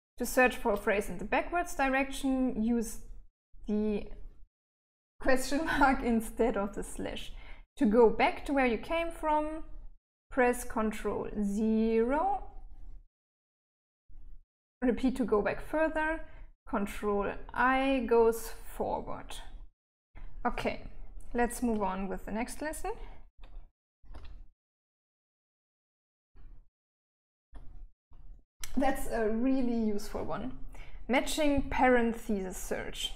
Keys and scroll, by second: 20.9 Escape, 23.2 j, 23.5 j, 24.0 j, 24.5 j, 25.5-26.7 j, 27.2 j.